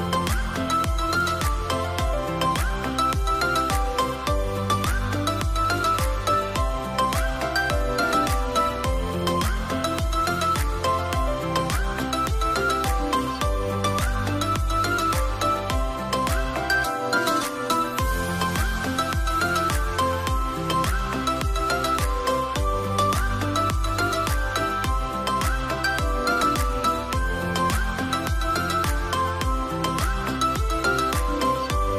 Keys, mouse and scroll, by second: 2.5 double click, 2.6 scroll up 1.